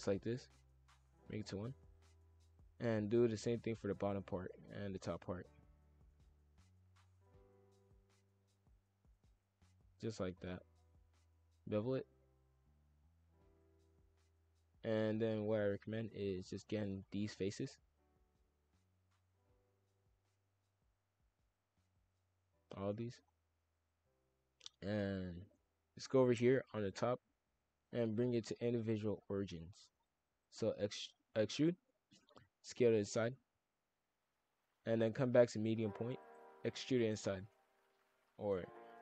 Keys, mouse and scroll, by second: 0.7-1.2 drag, 1.2-1.6 scroll up 3, 1.6-2.5 middle drag, 2.5 click, 3.0 shift+click, 3.6 shift+click, 4.1 shift+click, 4.5-5.2 middle drag, 5.2 shift+f, 7.5 shift+click, 7.9 shift+click, 8.6 shift+click, 9.7 shift+click, 10.4 shift+f, 12.0 ctrl+b, 13.2 shift+f, 15.3 click, 16.1 shift+f, 17.3 shift+click, 17.5 shift+f, 19.3 shift+drag, 19.9 shift+click, 20.5 shift+click, 21.3 shift+click, 21.7 shift+f, 23.2 shift+click, 23.5 shift+f, 25.4-28.5 drag, 29.4 shift+f, 30.3 e, 32.2 s, 34.7-36.1 drag, 36.1 e, 36.5 s, 37.9 shift+f.